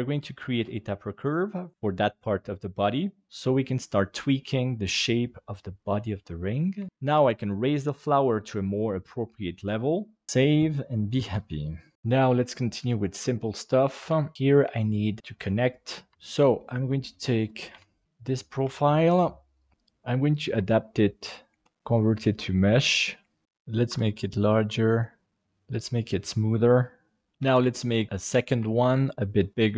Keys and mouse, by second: 1.2 right click, 1.4 middle click, 6.7 Tab, 6.9 g, 11.4 middle click, 14.0 KP_1, 14.3 click, 14.7-15.1 shift+middle drag, 16.1 KP_3, 16.9 middle drag, 17.7 KP_7, 18.6 shift+d, 19.7 g, 19.7 s, 20.5 g, 21.6 alt+c, 23.4 s, 25.4 ctrl+a, 26.0-27.3 drag, 27.3 shift+a, 27.4 shift+d, 28.5 s.